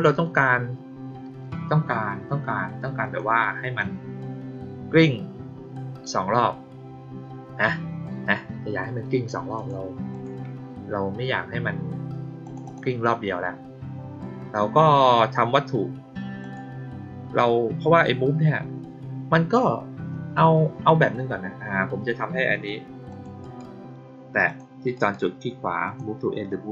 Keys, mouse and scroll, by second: 2.9 click, 9.5 click, 10.0 click, 12.4 click, 12.6 click, 16.3 click, 23.0 click, 23.3 right click, 24.4 click, 24.9 right click, 25.8 click.